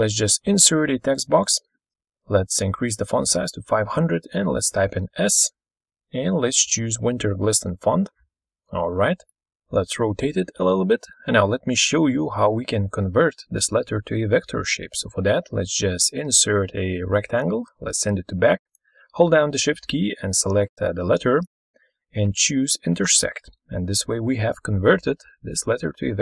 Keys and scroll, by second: 2.2-3.2 typing, 4.4 typing, 6.6-7.9 typing.